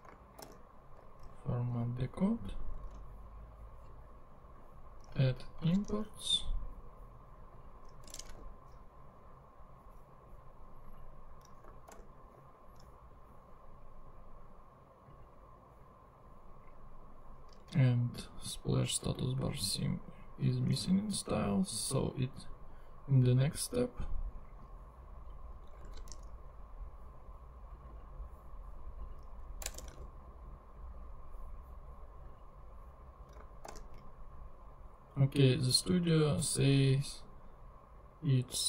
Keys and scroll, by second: 0.4 alt+super+l, 1.2 alt+super+Return, 2.0 alt+Return, 2.8 super+Tab, 5.6 super+c, 5.9 super+Tab, 8.0 Return, 8.2 super+v, 12.0 alt+super+l, 20.7 super+Tab, 25.9 super+c, 26.1 super+Tab, 29.6 Return, 29.9 super+v, 33.7 alt+super+l.